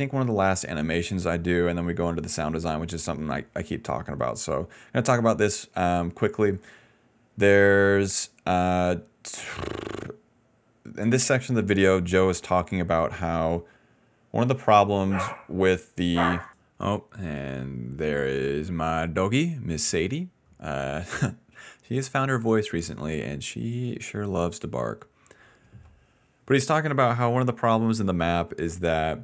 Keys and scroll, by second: 15.0 ctrl+v, 17.8-19.3 typing.